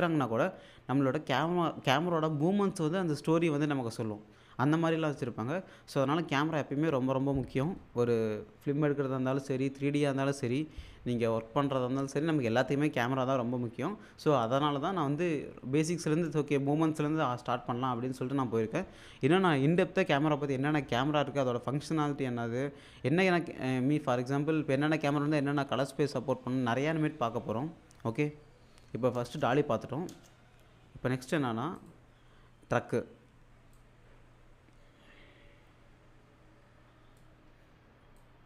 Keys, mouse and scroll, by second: 29.3 space, 31.8 click, 33.8-37.2 drag, 38.2-38.4 drag.